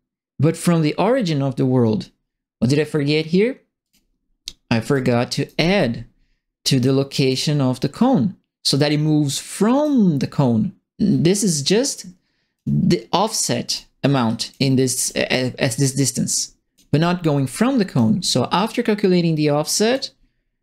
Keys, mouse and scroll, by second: 3.8 click, 4.9 right click, 6.8 click, 7.9 click, 9.2 right click, 11.9 click, 13.6 click, 14.2 click, 14.9 click, 15.9 click, 16.7-17.5 scroll down 2, 17.5 click, 17.9-19.7 scroll up 2, 19.7 click.